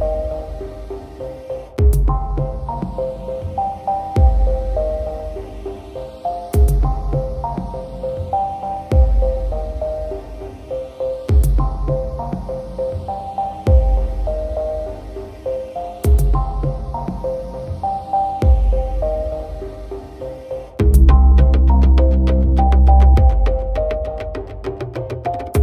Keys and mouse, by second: 1.0 right click, 1.5 right click, 1.7 right click, 2.1 right click, 3.2 right click, 3.4 right click, 3.8 right click, 4.5 right click, 5.8 right click, 6.7 right click, 7.4 right click, 7.7 right click, 8.1 right click, 8.6 right click, 9.0 right click, 9.3 right click, 9.7 right click, 10.2 right click, 10.9 right click, 12.2 right click, 12.7 right click, 14.9 right click, 16.7 right click, 16.9 right click, 17.5 right click, 17.9 right click, 18.1 right click, 18.5 right click, 18.9 right click, 19.3 right click, 19.6 right click, 19.9 right click, 20.2 right click, 20.5 right click, 21.1 right click, 21.7 right click, 23.5 right click, 24.1 right click, 24.7 right click, 25.0 right click.